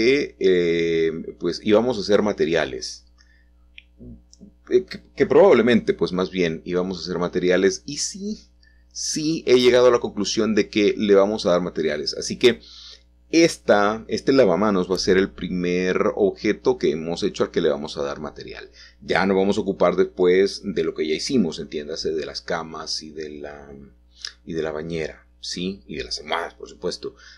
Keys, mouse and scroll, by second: 1.1-2.9 middle drag, 3.5 middle click, 3.6-4.4 scroll down 2, 4.8 middle click, 7.8 Escape, 7.8 middle click, 8.1-9.1 scroll up 1, 9.1 1, 10.4 middle click, 11.7 middle click, 14.6 k, 16.3-17.3 drag, 18.7 click, 19.7 Return, 20.3-21.5 drag, 21.6 g, 22.4 z, 27.1 shift+click.